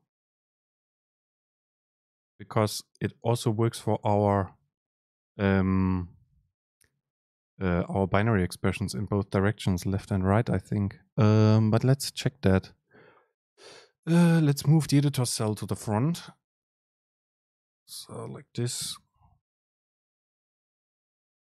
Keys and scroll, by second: 16.9 shift+Right, 17.5 shift+Left, 18.0 shift+Down, 18.8 super+x, 19.7 End, 20.0 Left, 20.8 Left, 21.1 BackSpace.